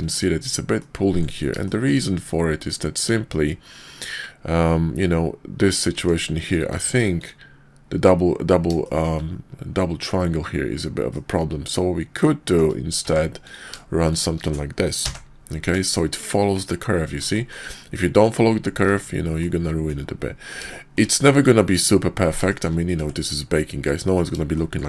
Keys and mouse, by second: 0.8 click, 1.6 shift+drag, 5.9 Tab, 6.3 click, 6.7 x, 8.8 shift+click, 11.1-12.6 shift+drag, 13.0 Tab, 14.0 shift+click, 15.0 j, 15.6 Tab, 17.3 shift+drag, 19.4 click, 20.7-21.0 shift+drag, 22.4 shift+drag, 22.9 Tab, 24.5 shift+click.